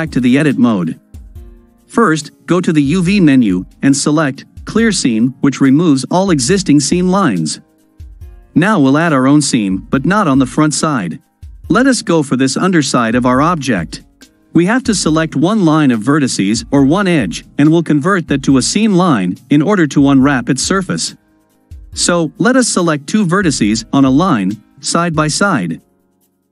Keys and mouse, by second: 3.1-7.1 drag, 11.0-14.2 middle drag, 20.5-21.5 ctrl+drag, 24.8 shift+click.